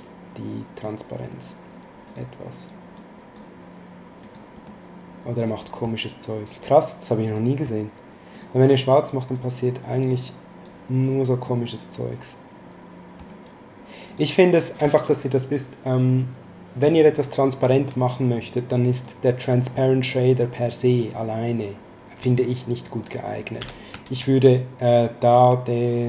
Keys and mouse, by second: 2.0 click, 4.2 click, 4.6 middle click, 7.1 middle click, 8.3 click, 11.4 middle click, 14.0 click, 19.0 click, 23.0 click, 23.5 x, 24.1 shift+a.